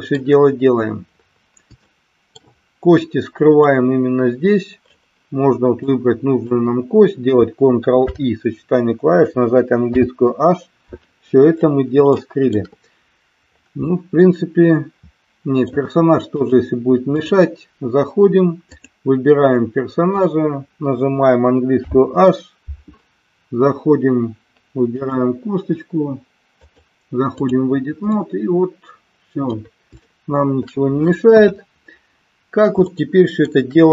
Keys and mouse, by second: 1.9 shift+middle click, 3.8-4.9 drag, 5.8 click, 7.9 ctrl+i, 9.9 h, 12.2 shift+middle click, 13.9-15.9 middle drag, 16.4-17.4 drag, 18.7 click, 21.7 h, 26.4-27.7 drag, 28.3-29.6 middle drag, 30.1 shift+middle click, 31.3 KP_1, 32.8 shift+middle click.